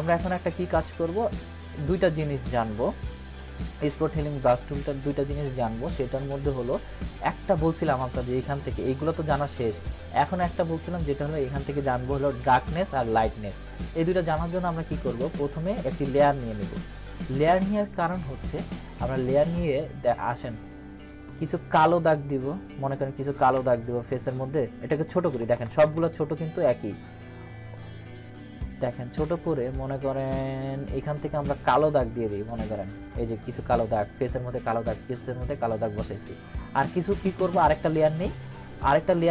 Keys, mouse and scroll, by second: 0.2 right click, 2.3-4.8 drag, 10.9 click, 14.4 click, 19.4-20.3 drag, 25.1-26.0 typing, 30.4 click, 38.1 click.